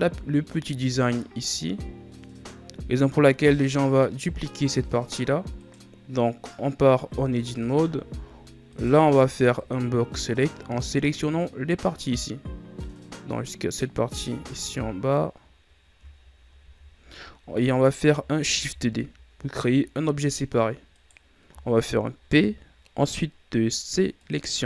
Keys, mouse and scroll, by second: 3.5-4.1 scroll down 2, 4.1-5.5 scroll up 1, 5.5 right click, 7.1 Tab, 7.8 z, 8.6 right click, 8.9 b, 14.1 scroll down 5, 14.4-15.5 scroll up 4, 15.5 scroll down 4, 16.1 scroll up 5, 16.5 z, 18.5 shift+d, 22.2 p.